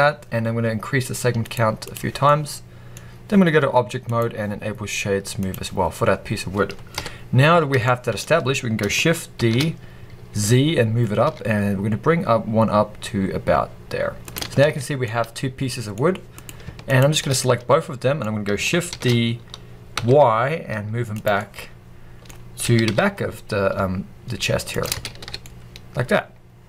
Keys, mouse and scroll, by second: 2.1 scroll down 2, 2.1-3.9 middle drag, 3.9-7.8 drag, 5.7-6.6 scroll down 1, 6.8 KP_1, 7.4 scroll up 1, 7.8-9.3 shift+middle drag, 9.2 shift+d, 14.2 shift+click, 14.4 scroll down 1, 14.5 alt+a, 14.9-16.3 middle drag, 15.8-16.3 scroll up 2, 16.3 click, 16.7 shift+click, 17.3-19.8 middle drag, 18.8 shift+d, 21.1 click, 21.2-22.2 middle drag, 22.2-22.5 scroll up 2, 22.5 g, 24.3 middle click, 24.7 shift+click, 25.0 alt+a, 25.1 alt+scroll down 1, 25.3-26.6 middle drag.